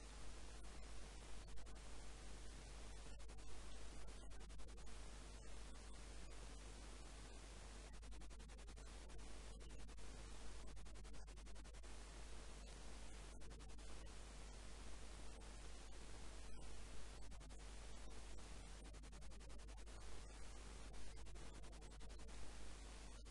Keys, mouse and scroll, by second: 0.6 a, 1.0 b, 2.4-4.2 drag, 4.0 a, 4.6 b, 5.8-7.8 drag, 9.9 a, 10.6 b, 11.9-13.8 drag, 13.4 a, 14.2 b, 16.6 b, 17.8-19.6 drag, 21.8 z, 22.2 Tab, 22.2 middle click, 23.1-23.3 typing.